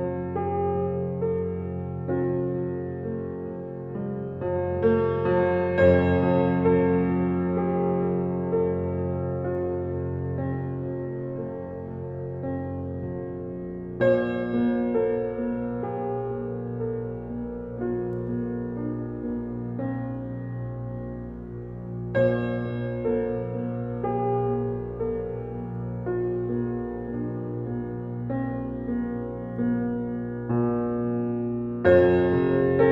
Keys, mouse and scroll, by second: 1.1-1.6 scroll up 1, 2.9 scroll up 1, 3.3-4.3 scroll down 1, 7.8 scroll up 1.